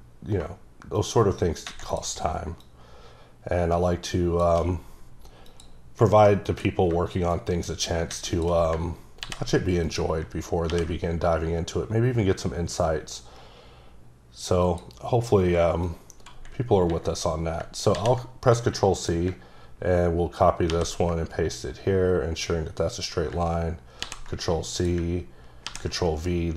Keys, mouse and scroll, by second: 1.0 shift+double click, 2.6 shift+click, 6.5 click, 7.3 shift+click, 9.2 c, 9.9 click, 10.7 ctrl+v, 14.7 click, 15.9 click, 19.0 click, 20.7 ctrl+v, 23.0 click, 24.0 ctrl+c, 24.8 click, 25.6 ctrl+v.